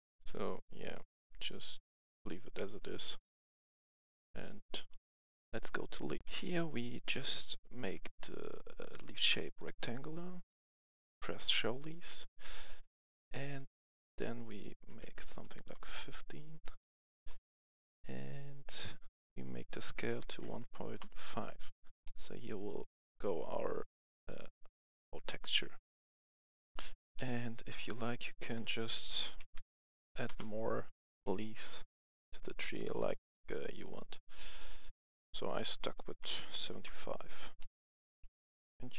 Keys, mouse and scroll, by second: 0.3 scroll down 1, 1.2 scroll up 1, 3.2 click, 6.2 F10, 7.1-10.6 drag, 14.8 KP_5, 15.5 Return, 17.2 scroll down 1, 19.0 click, 19.8 KP_1, 20.0 KP_Decimal, 20.2 KP_5, 20.8 Return, 22.0 middle click, 22.8 middle click, 24.1-26.5 middle drag, 26.5 Return, 26.6 F10, 27.1 middle click, 28.2 click, 29.3-29.7 typing, 30.2 Return, 31.1-32.9 middle drag, 32.9-34.6 middle drag, 34.6 click, 36.1-36.4 typing, 36.6 Return, 37.5-38.9 middle drag.